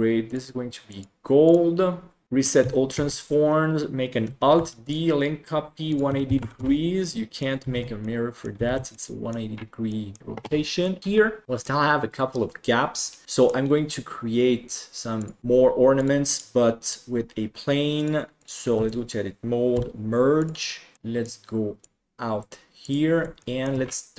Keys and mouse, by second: 1.0 click, 2.2 ctrl+a, 2.2 middle drag, 3.6 ctrl+s, 4.5 alt+d, 6.0 click, 7.0-7.4 middle drag, 7.7 alt+a, 8.0-8.4 middle drag, 9.2 ctrl+s, 9.2 middle click, 9.8 middle drag, 10.8 middle drag, 11.4 middle drag, 13.2 middle click, 15.1 click, 15.9-16.9 drag, 17.9 click, 18.7 Tab, 19.7 m, 20.9 middle click, 21.2 click, 22.8 click, 23.4 shift+middle click.